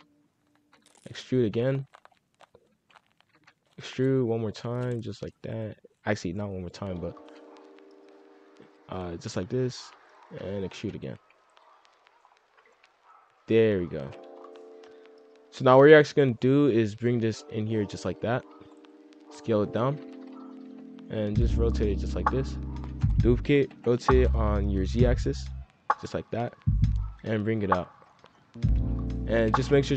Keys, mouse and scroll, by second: 0.0-5.1 typing, 7.1 e, 9.8 r, 10.2 e, 10.7 g, 11.1 r, 12.2 scroll down 2, 12.4 middle click, 12.9 z, 14.3-15.3 scroll down 1, 15.3 F2, 15.8 a, 16.9 click, 18.3 scroll up 1, 18.4 middle click, 18.9 scroll up 1, 19.1-21.1 typing, 20.3 scroll up 2, 22.9 shift+d, 23.4 r, 26.4 click, 28.3 middle click, 28.7 a, 29.3 s.